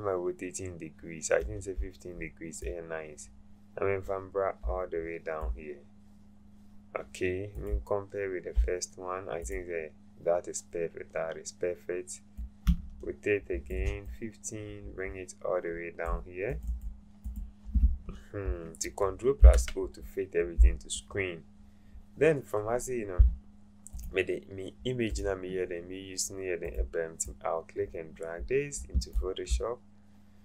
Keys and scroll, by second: 19.4 ctrl+0.